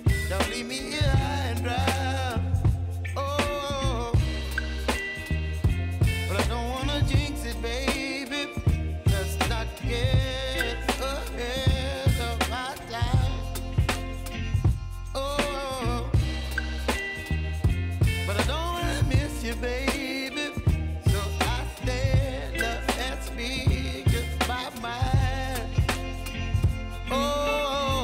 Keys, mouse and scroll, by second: 0.8-1.2 alt+scroll up 1, 1.4 v, 1.9-4.0 drag, 4.0 space, 4.1 click, 4.7 space, 5.9-10.0 drag, 16.0 Left, 17.8 click, 21.9 y, 22.8 click, 23.3 right click, 24.8 click, 27.1-28.0 drag.